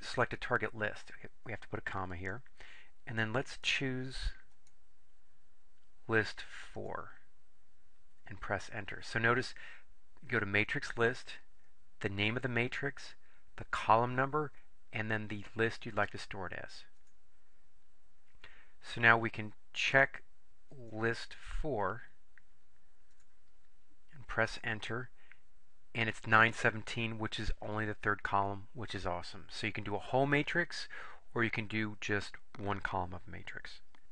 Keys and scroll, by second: 2.3 ,, 6.8 4, 17.1 Return, 23.2 4, 24.6 Return.